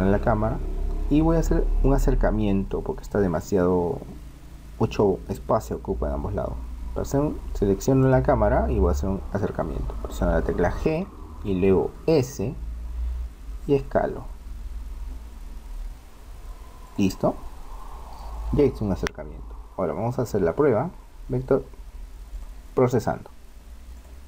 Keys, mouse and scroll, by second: 8.0-9.9 right drag, 10.8 g, 22.3 click.